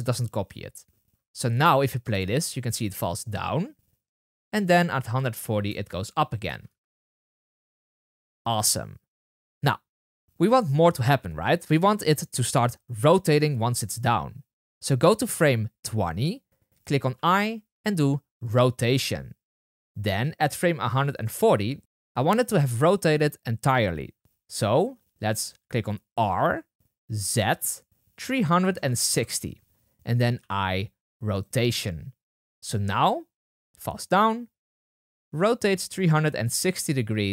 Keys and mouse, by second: 1.5 space, 5.6 space, 6.4 space, 6.6 space, 11.6-16.3 drag, 17.1 i, 25.6 i, 26.3 r, 30.7 i, 32.5 space, 34.9 click.